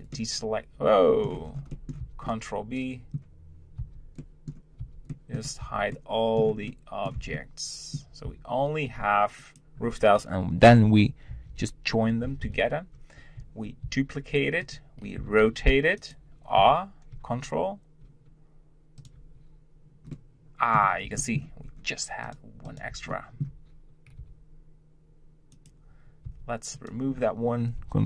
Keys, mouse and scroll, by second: 0.2-1.4 middle drag, 1.4 scroll down 2, 1.7 middle click, 2.0 b, 3.8 b, 5.3-5.6 middle drag, 5.6 b, 6.7-7.2 middle drag, 7.2 b, 11.3 ctrl+j, 12.4 KP_7, 13.8 shift+d, 15.2 r, 16.6 r, 20.1-21.6 middle drag, 21.6-22.2 scroll up 1, 22.2 click, 22.6 click, 23.1-24.2 shift+middle drag, 24.2 g, 26.3 Tab, 26.7 click.